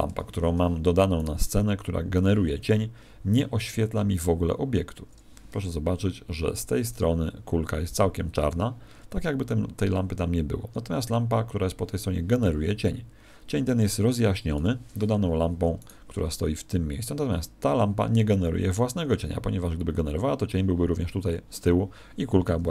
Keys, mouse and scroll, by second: 0.0 Escape, 1.1 right click, 15.1 Escape, 15.7 right click.